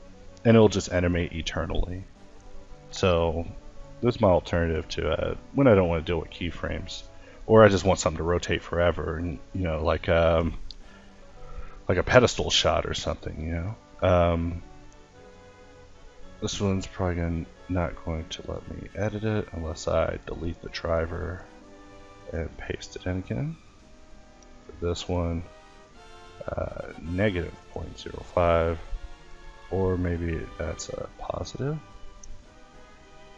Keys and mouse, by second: 1.0 Left, 5.4-6.7 drag, 6.7-8.0 middle drag, 8.0 Left, 11.6-13.9 drag, 13.9 Left, 17.8-22.7 drag, 22.7 a, 23.1-24.5 drag, 25.9 Left, 28.7 click, 29.6 Left, 30.1 Right.